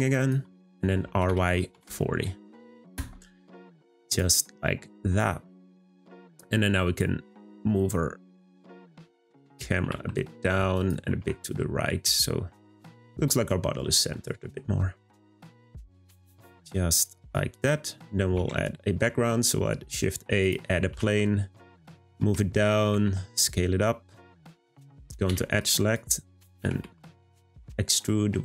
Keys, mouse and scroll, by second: 1.0 r, 4.0 click, 5.9-7.4 scroll down 1, 7.4 click, 8.5 drag, 9.3 click, 9.8 g, 17.5 click, 17.8-18.3 scroll down 2, 18.3 shift+a, 20.9 g, 22.9 s, 25.5 click, 26.5 e.